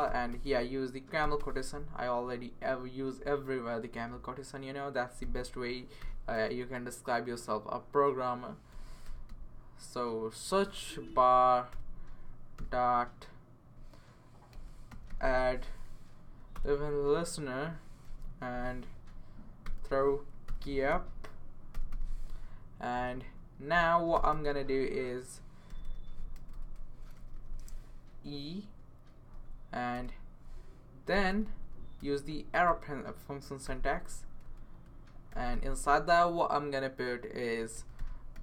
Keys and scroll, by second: 0.0-1.9 typing, 6.0-6.3 typing, 8.4-9.8 typing, 11.1 Down, 11.3 Down, 11.7 Return, 12.6 typing, 14.6-15.7 typing, 16.2 Down, 16.5 Return, 18.0 typing, 18.9 Left, 19.4-22.2 typing, 23.2 Right, 23.9-28.6 typing, 27.9 Left, 29.3 Right, 29.9 space, 31.1 =, 31.3 space, 32.0 BackSpace, 33.7-34.4 typing, 35.5 typing, 37.5-38.4 typing.